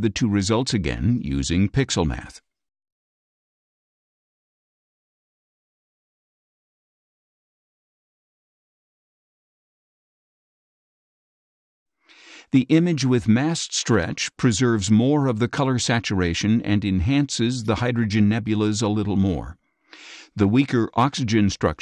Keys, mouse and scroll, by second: 2.3 click, 5.0 click, 7.2-9.2 drag, 11.7 click, 13.3 ctrl+shift+z, 14.5 ctrl+shift+z, 15.5 ctrl+shift+z, 16.4 ctrl+shift+z, 17.5 ctrl+shift+z.